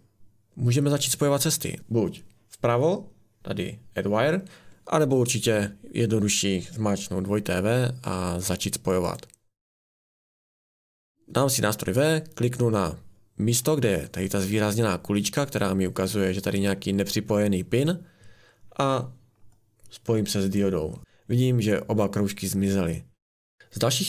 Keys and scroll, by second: 10.7 Escape, 23.6 ctrl+z.